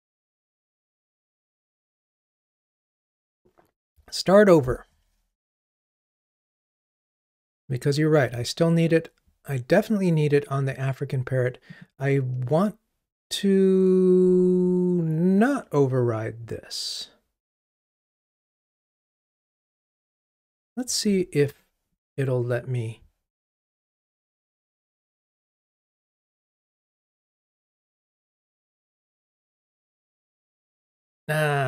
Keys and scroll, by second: 21.1 Delete, 24.9 super+F6.